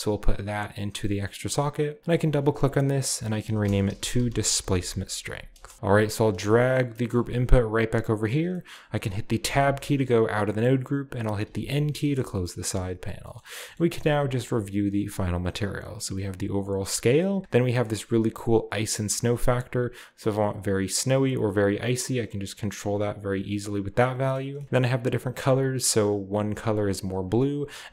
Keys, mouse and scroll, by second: 3.6-5.5 typing, 5.7-6.8 scroll down 2, 6.0 click, 6.5 middle click, 7.2 g, 8.3 click, 9.5 Tab, 9.8-11.5 scroll up 1, 10.7-11.5 middle drag, 11.5-12.2 scroll up 1, 11.5 g, 12.2 middle click, 12.2 scroll down 1, 12.5-13.3 middle drag, 12.7-13.3 scroll up 1, 13.3-15.1 scroll up 1, 13.4 middle drag, 13.8 ctrl+middle click, 14.0 ctrl+s, 15.1-17.2 drag, 17.2 middle click, 17.7-18.4 scroll up 1, 18.4-24.0 drag, 24.0 middle click, 24.5 scroll down 1, 24.5 middle click, 25.5-27.0 drag, 27.0 middle click, 27.1 click, 27.8 click.